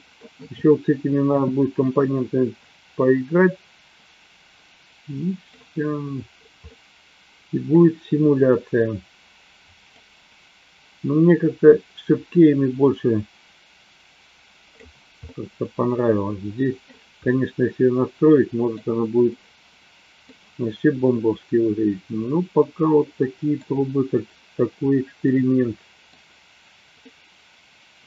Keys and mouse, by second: 2.9-5.6 middle drag, 6.7-7.7 middle drag, 9.9-15.0 drag, 15.2-16.8 middle drag, 17.2-18.8 middle drag, 21.2-23.6 middle drag, 25.3-26.7 middle drag, 27.0-28.0 middle drag.